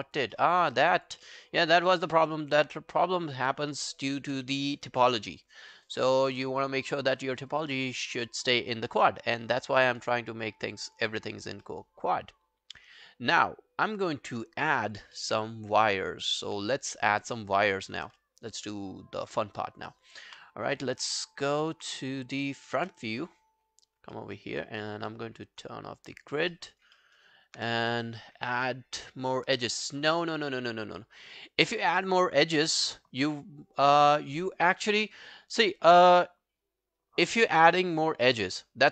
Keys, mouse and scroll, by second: 0.4 alt+middle click, 0.6 alt+right click, 0.9 alt+click, 1.2 alt+middle click, 1.7 alt+click, 2.1 alt+middle click, 2.4 alt+right click, 3.5 scroll down 1, 3.8 alt+click, 4.4 alt+middle click, 4.7 alt+click, 5.2 alt+middle click, 5.4 alt+right click, 5.7 alt+click, 6.1 alt+middle click, 6.5 alt+right click, 6.8 alt+click, 7.2 alt+middle click, 7.4 alt+right click, 7.7 alt+click, 8.3 alt+middle click, 8.6 alt+scroll down 1, 8.9 alt+middle click, 9.3 alt+scroll down 1, 9.5 alt+click, 11.0 alt+scroll up 1, 11.2 alt+click, 11.7 alt+middle click, 12.0 alt+scroll up 1, 12.2 alt+click, 15.2 alt+middle click, 15.6 alt+click, 16.1 alt+scroll down 1, 16.3 alt+click, 17.1 scroll down 2, 17.3 alt+click, 18.1 space, 20.3 space, 20.5 scroll down 1, 21.8 space, 22.8 space, 23.6-24.2 scroll down 9, 24.2 alt+middle click, 24.4 alt+right click, 24.6 alt+middle click, 24.8 alt+right click, 25.1 alt+middle click, 26.5 alt+middle click, 26.7 alt+right click, 27.0 alt+middle click, 27.2 alt+right click.